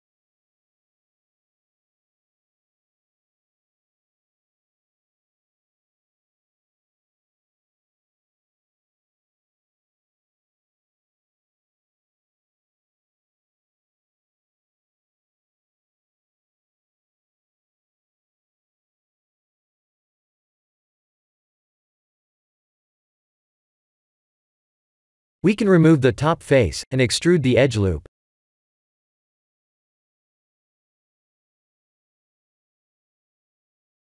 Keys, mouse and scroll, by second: 0.0 g, 2.4 click, 2.7 b, 3.5 g, 5.8 click, 6.0 b, 6.6 g, 8.2 click, 8.6 middle click, 13.1 3, 13.2 click, 13.9 click, 15.2 KP_1, 15.6 KP_3, 16.8 s, 19.8 middle click, 25.1 click, 25.8 x, 28.5 2, 28.9 alt+click, 30.8 middle click, 33.4 e.